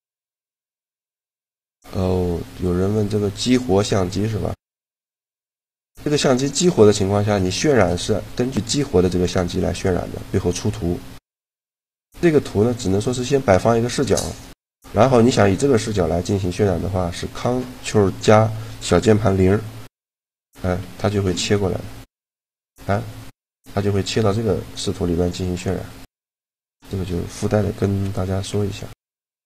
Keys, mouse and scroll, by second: 3.0 middle click, 5.2-7.7 middle drag, 9.0-10.9 middle drag, 12.0 right click, 12.5-20.0 middle drag, 15.9 click, 15.9 right click, 20.0 ctrl+KP_0, 21.7 middle click, 23.3-26.6 drag, 25.7 right click, 27.7 ctrl+KP_0.